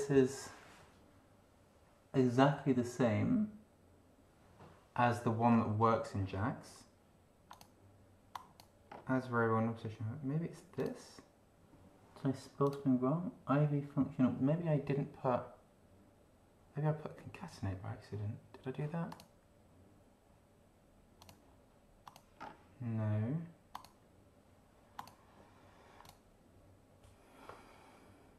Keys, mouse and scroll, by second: 5.5 scroll down 1, 7.5 click, 8.3 click, 8.9 scroll down 1, 10.8 click, 12.7 click, 19.1 click, 21.2 click, 22.1 click, 22.3-22.7 scroll down 1, 23.7 click, 24.9 click, 26.0 click.